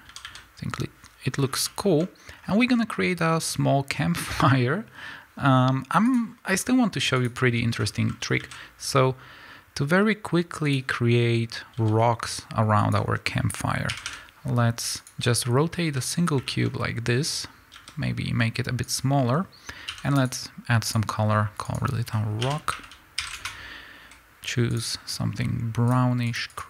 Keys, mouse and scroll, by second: 0.0 a, 7.1 click, 10.7 shift+a, 11.7 s, 12.9 click, 13.9 r, 15.0 click, 15.9 z, 17.6-18.8 middle drag, 17.6 s, 18.8 click, 19.8 g, 20.2 click, 20.9-24.9 drag, 23.4 Return, 26.2 click, 26.4 click.